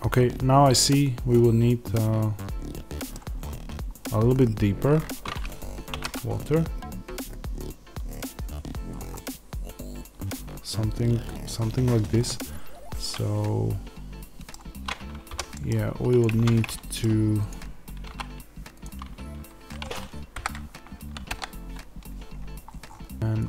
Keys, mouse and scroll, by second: 3.2-3.9 scroll up 2, 3.9-5.8 scroll down 2, 5.8 g, 8.8 click, 9.0-16.1 middle drag, 16.1 click, 16.2 Tab, 16.6 middle click, 17.4 click, 17.9 3, 18.7 click, 20.2 KP_7, 23.1 Tab.